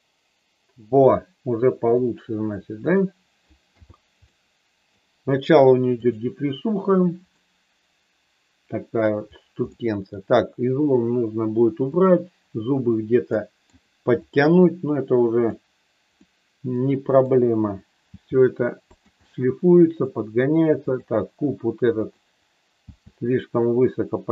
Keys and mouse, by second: 2.8 click, 3.7 n, 4.2 middle click, 5.9 click, 7.5-8.9 middle drag, 9.6 middle click, 11.8 click, 13.3 middle click, 15.4 click, 16.2-17.2 middle drag, 18.1 g, 18.8 click, 19.1 middle click, 20.8 click, 22.0 click, 22.7 g.